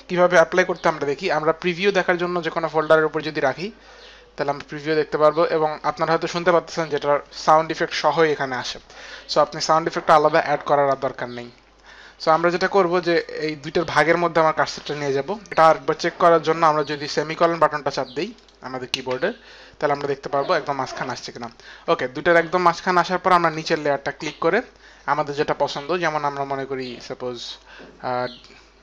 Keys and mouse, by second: 12.9 click, 18.5 click, 19.3 click, 23.6 click, 26.6 click.